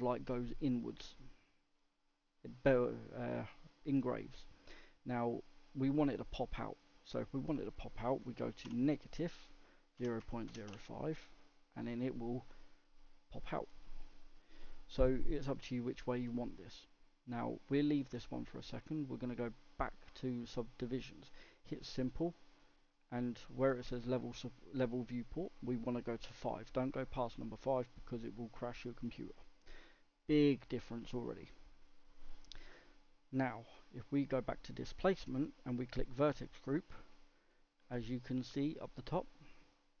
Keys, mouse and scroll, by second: 0.5-3.6 middle drag, 21.4-28.4 drag, 29.7-40.0 middle drag.